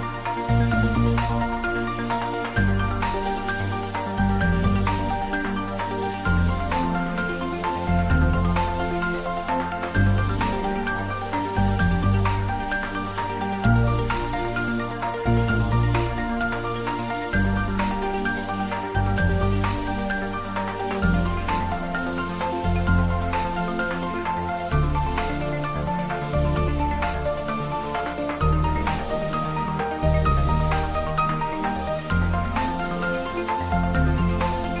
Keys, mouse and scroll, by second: 0.1 ctrl+z, 4.7 click, 5.1 d, 6.3 click, 6.6 ctrl+b, 7.0 click, 7.3 ctrl+z, 7.6 ctrl+click, 8.4 ctrl+z, 11.5 click, 11.6 Tab, 11.8 middle click, 13.0 click, 13.3 ctrl+middle click, 13.6 Tab, 13.8 middle click, 14.2 click, 14.6 3, 14.7 click, 15.8 s, 16.5 click, 16.6 ctrl+z, 17.8 Tab, 18.0 s, 18.8 click, 21.6 Tab, 22.0 ctrl+z, 23.9 click, 24.8 shift+z, 25.0 click, 25.4 s, 26.9 click, 27.5 ctrl+e, 27.9 click, 28.5 ctrl+r, 28.9 click, 30.1 g, 31.0 click, 31.1 s, 33.2 click, 34.1 g.